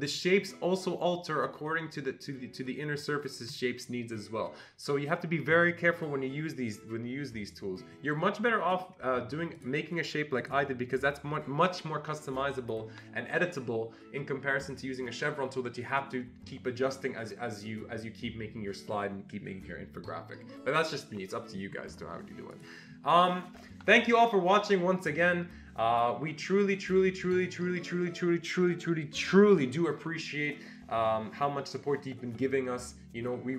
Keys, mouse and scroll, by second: 0.1 click, 9.5 click, 10.4 click, 11.0-13.6 click, 22.5 click.